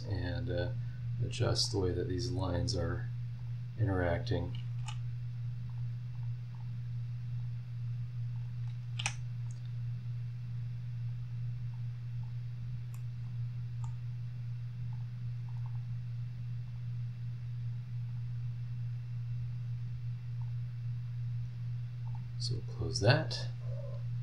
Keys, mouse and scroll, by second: 0.6 click, 1.6 click, 2.2 scroll up 1, 3.4 click, 4.3 click, 4.8 h, 5.7 click, 6.1 click, 6.5 click, 7.4 click, 8.3 click, 9.0 h, 9.7 scroll down 2, 10.2 scroll up 2, 11.1 click, 11.7 click, 12.5 scroll down 2, 12.9-14.0 middle drag, 14.1 scroll up 2, 14.9 click, 15.5 click, 16.7 click, 18.1 click, 20.4 click, 21.0 scroll down 1, 22.1 click, 24.0 scroll up 1.